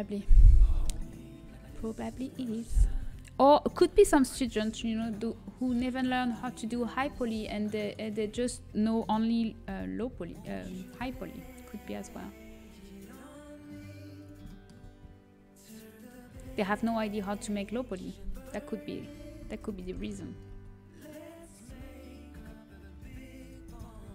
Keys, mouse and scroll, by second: 0.8 KP_1, 1.9 z, 5.0 middle click, 5.5-7.7 middle drag, 6.9 click, 7.6-9.5 right drag, 7.7-8.8 drag, 8.2 middle click, 9.9-11.2 middle drag, 11.2 g, 14.3-15.8 middle drag, 19.5 ctrl+KP_Add, 20.7 g.